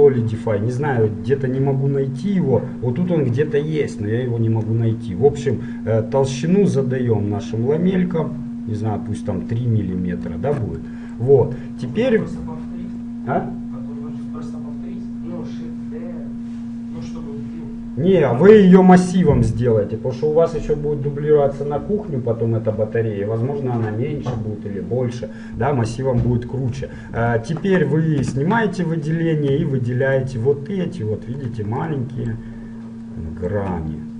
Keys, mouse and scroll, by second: 5.0 middle click, 5.8-7.6 drag, 11.0-15.7 middle drag, 27.1 ctrl+Tab, 28.5 a, 30.2-32.1 right drag, 32.1-34.1 middle drag.